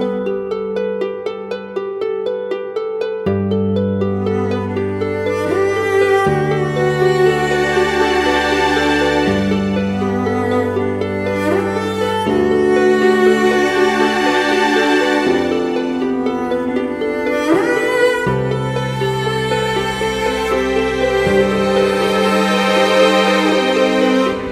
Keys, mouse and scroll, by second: 14.7 double click.